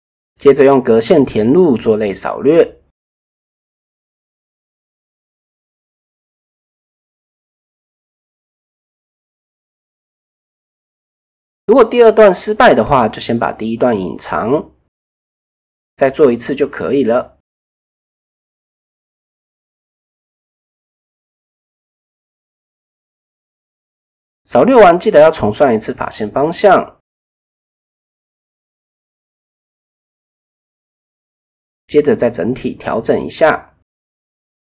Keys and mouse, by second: 0.3 shift+click, 1.3-1.6 right drag, 1.7 Escape, 2.5 ctrl+f, 4.8 click, 5.8 click, 6.1 click, 7.0 shift+click, 7.7 shift+click, 9.3 ctrl+f, 10.8 middle click, 12.1 click, 12.9 click, 14.0 h, 14.3 middle click, 15.3 click, 16.1 shift+click, 17.3 ctrl+f, 18.9 click, 19.2 middle click, 19.8 click, 21.0 alt+h, 21.3 click, 22.2 a, 23.1 a, 24.2 shift+n, 24.6 middle click, 25.2 KP_1, 26.6 shift+middle click, 27.8 KP_3, 29.8 middle click, 31.0 alt+click, 32.2 shift+click, 33.0 KP_3, 33.8 shift+click.